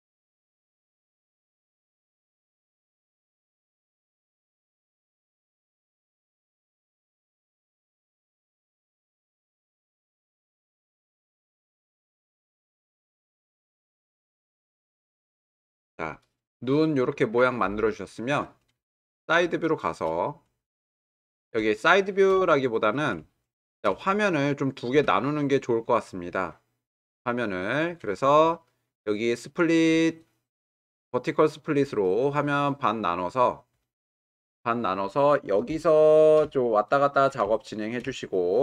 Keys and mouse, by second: 1.3 g, 6.2 g, 8.9 g, 19.5-20.5 shift+middle drag, 21.0-21.5 middle drag, 21.9-22.3 shift+middle drag, 22.5-23.1 ctrl+middle drag, 23.3-23.8 shift+middle drag, 24.1-24.9 ctrl+middle drag, 25.3-25.9 shift+middle drag, 26.4-27.0 middle drag, 27.4-27.9 shift+middle drag, 29.3-33.5 right drag, 36.4 middle click, 38.0 middle click.